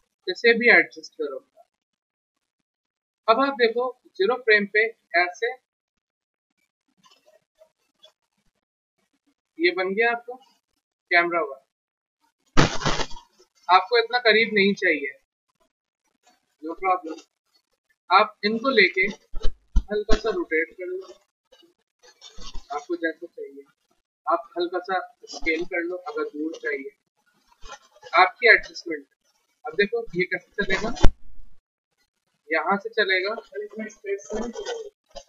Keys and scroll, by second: 18.9 e, 23.7 w, 24.0 r, 27.3 e, 29.1 w.